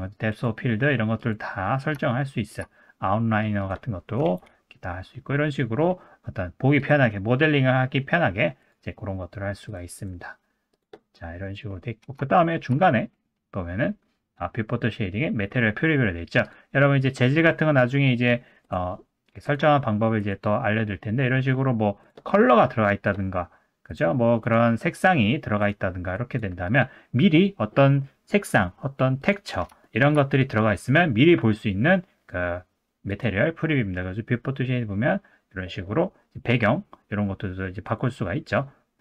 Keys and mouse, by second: 2.1-2.5 shift+middle drag, 3.3 middle click, 4.2 ctrl+w, 6.8-11.0 drag, 12.3 shift+middle drag, 18.1 middle click, 18.6 click, 22.0 click, 23.9 click, 24.5 click, 25.6 click, 29.8 shift+middle drag, 33.1-39.0 drag.